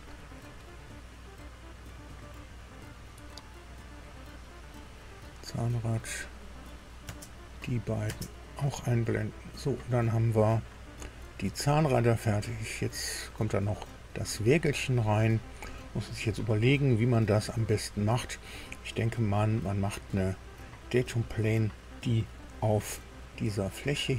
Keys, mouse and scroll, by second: 0.0-1.0 scroll down 6, 2.2 scroll down 2, 3.5-3.8 scroll down 2, 4.3 scroll up 2, 5.3 scroll up 2, 6.7 click, 7.0 space, 7.6 click, 8.0 space, 8.9 scroll up 2, 9.0-13.2 middle drag, 13.7 middle click, 15.7 scroll up 2, 16.2-18.3 middle drag.